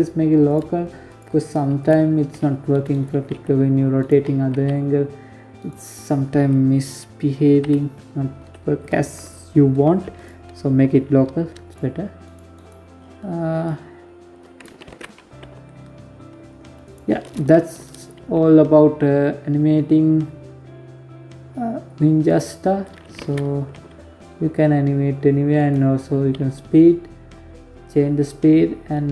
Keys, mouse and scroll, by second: 0.7 middle click, 1.3 right click, 1.7 r, 2.6 middle click, 2.9 r, 6.0 KP_7, 8.5 right click, 10.1 right click, 10.6 right click, 11.0 right click, 11.3-12.0 scroll down 6, 12.0 click, 13.2 ctrl+z, 13.8 g, 15.6 scroll down 3, 15.7 shift+scroll up 1, 15.9 shift+middle click, 16.5 g, 21.5 ctrl+z, 22.1 g, 24.3 scroll up 3, 24.7 g, 28.3 g.